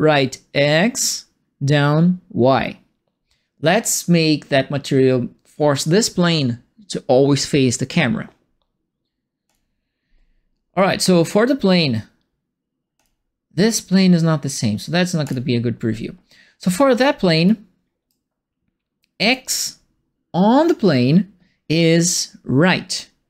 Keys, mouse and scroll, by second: 9.4 click, 12.9 click, 15.2 click, 17.4 right click, 19.2 click.